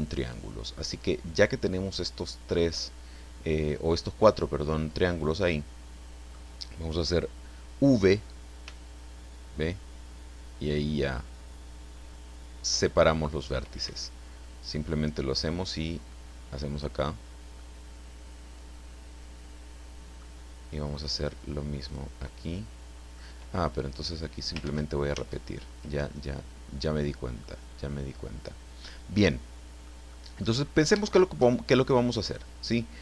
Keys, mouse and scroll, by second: 1.1 right click, 1.5-6.5 middle drag, 8.6 v, 13.8 Escape, 14.9-17.0 drag, 17.5-20.4 middle drag, 21.8 right click, 22.3-23.3 middle drag, 24.6 ctrl+z, 26.0-26.9 ctrl+scroll down 5, 27.4-30.0 middle drag, 30.1 middle click, 31.0 shift+middle click, 32.2 click.